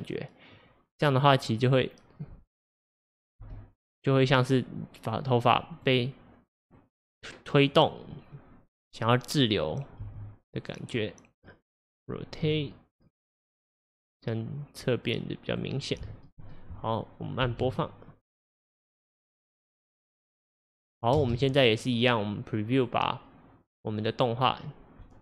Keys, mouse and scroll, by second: 1.0 click, 3.5 g, 5.8 click, 6.8 click, 10.1 g, 12.5 r, 14.0 click, 14.9 click, 17.5 space, 21.2 space, 22.8-25.2 drag.